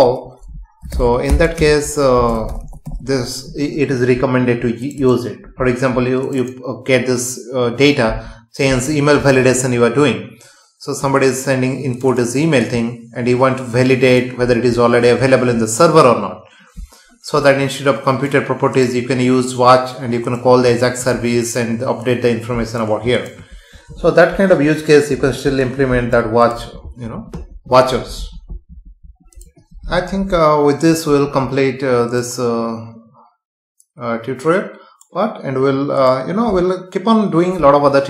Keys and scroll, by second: 1.6 space.